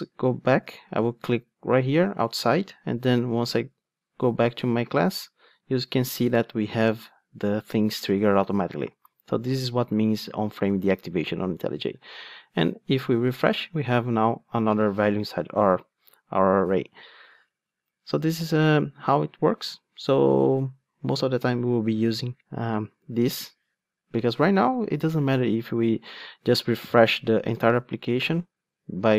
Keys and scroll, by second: 27.5 super+r.